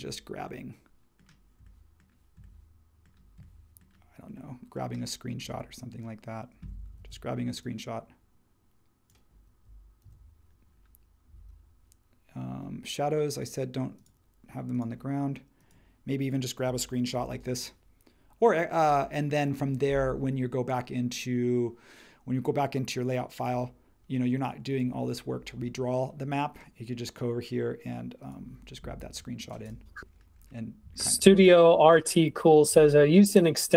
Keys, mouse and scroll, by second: 7.0 shift+super+4, 10.0 super+1, 17.1 shift+super+4.